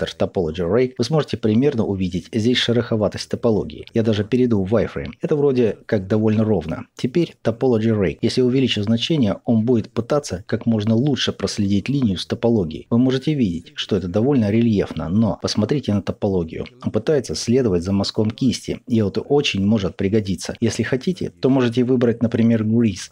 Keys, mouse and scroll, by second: 0.9-8.0 ctrl+middle drag, 4.0 z, 8.0-9.1 drag, 9.1 ctrl+middle click, 9.7-13.0 drag, 13.0-22.8 middle drag, 22.8-23.1 drag.